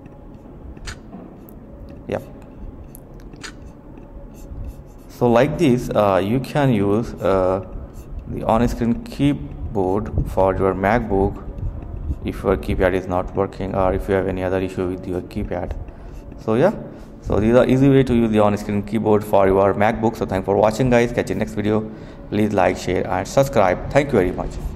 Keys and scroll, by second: 1.3 alt+space, 3.2-5.8 typing, 7.4-12.8 typing, 14.2-16.2 typing.